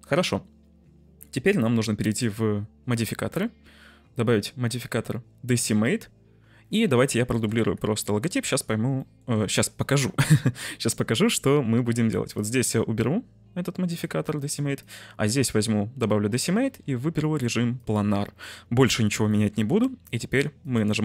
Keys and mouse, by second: 2.0 click, 2.8-5.8 drag, 7.0 click, 7.3 shift+d, 7.5 x, 8.2 click, 8.9-9.2 shift+middle drag, 14.7 click, 17.7 click, 19.4 shift+middle click, 20.5-21.0 drag.